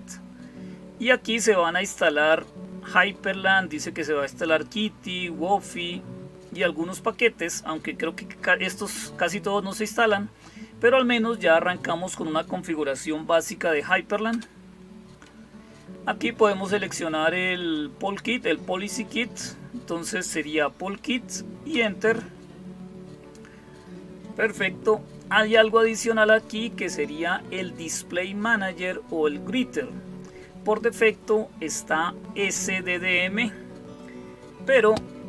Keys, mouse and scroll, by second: 14.1 Return, 21.5 Return, 25.3 Down, 25.6 Down.